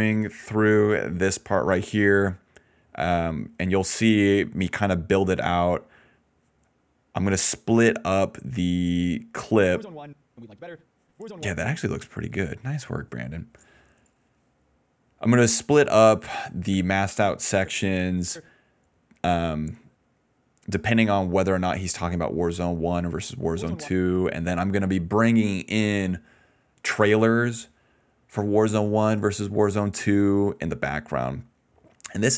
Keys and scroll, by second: 9.5-11.3 typing, 16.6-18.8 typing, 23.3 space, 23.8 space.